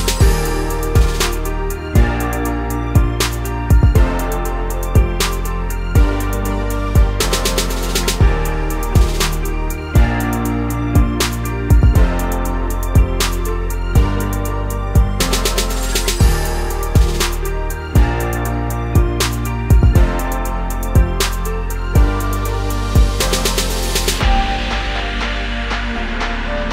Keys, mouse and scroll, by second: 1.5 click, 1.9 g, 4.3 click, 5.5 k.